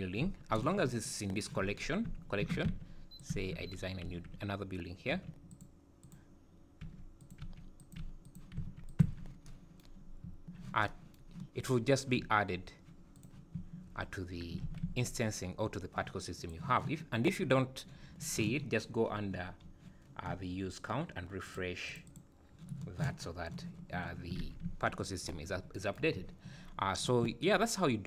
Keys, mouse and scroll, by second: 2.4 shift+d, 3.3 Tab, 5.1 3, 5.5 click, 6.0 click, 6.8 e, 7.4 e, 8.0 e, 8.6 s, 9.1 Tab, 10.1 scroll up 2, 10.2 `, 12.2 `, 13.2 click, 14.7 alt+a, 16.4 click, 18.8-20.0 scroll down 19, 20.2-20.6 scroll up 1, 21.5 click, 21.9 click, 22.7 click, 24.4 alt+a, 26.1 `, 26.8 scroll down 2, 27.8 scroll up 3.